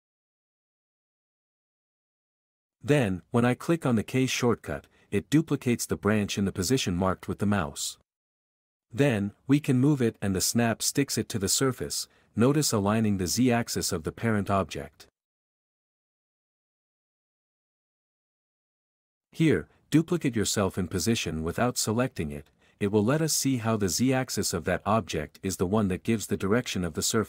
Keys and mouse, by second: 1.3 g, 5.2 k, 10.8 alt+a, 13.0 k, 15.8 s, 16.8 s, 16.9 z, 17.9 click, 19.1 click, 23.0 k.